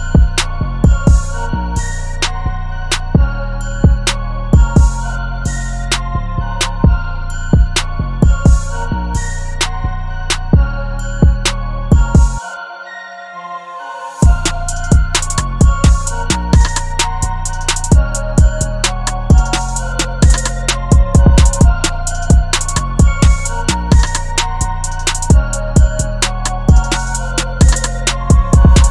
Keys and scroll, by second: 4.2 v, 9.2 BackSpace, 27.8-28.9 typing.